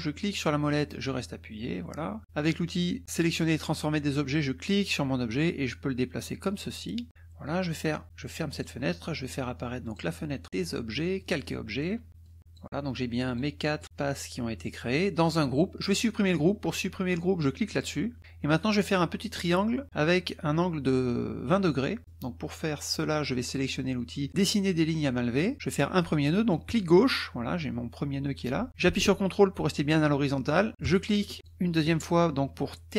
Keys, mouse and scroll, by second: 0.1-2.2 right drag, 2.2-4.7 middle drag, 4.7-7.1 drag, 8.6 click, 9.8 click, 11.2 click, 12.2 click, 13.2 click, 13.8 drag, 15.1 click, 17.7 click, 21.7 click, 25.3 click, 26.7 click, 30.8 ctrl+click, 31.5 ctrl+click.